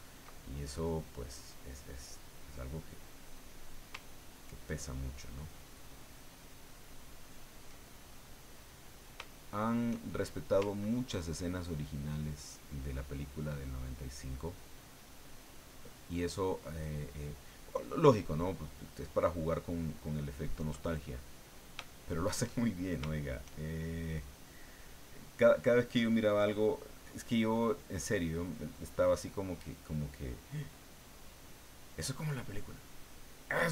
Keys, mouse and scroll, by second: 0.3-1.4 ctrl+middle drag, 1.8-3.7 middle drag, 4.3-7.7 ctrl+drag, 7.7-9.2 ctrl+middle drag, 9.3-10.5 shift+middle drag, 11.4-20.7 ctrl+drag, 20.8 ctrl+middle click, 21.9 shift+middle click, 22.6 shift+click, 23.1 shift+click, 29.1 click, 30.1-33.7 drag.